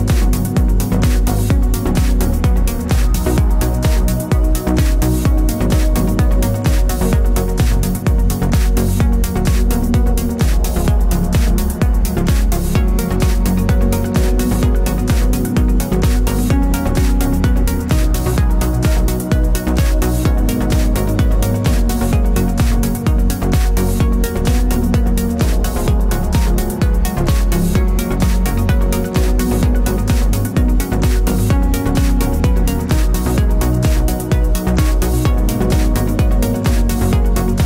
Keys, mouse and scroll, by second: 2.5 g, 2.5 click, 2.7-3.8 middle drag, 3.8 click, 4.2 scroll down 1, 5.9 click, 6.4-9.4 middle drag, 7.2 alt+d, 9.4 ctrl+z, 9.6-11.2 middle drag, 10.5 r, 11.2 click, 11.3-12.8 middle drag, 12.0-12.5 scroll up 2, 12.5 r, 12.8 click, 13.0-14.3 middle drag, 13.2 g, 14.3 click, 14.4-15.5 middle drag, 15.0 r, 15.5 click, 15.6 g, 16.7-19.7 middle drag, 18.2 r, 19.7 click, 19.9-22.4 middle drag, 21.8 alt+d, 22.4 click, 22.5-25.2 middle drag, 22.8 r, 25.2 click, 25.3-31.8 middle drag, 26.3 r, 28.9 s, 29.9 g, 31.8 click, 32.5-34.3 middle drag, 34.3-37.6 drag.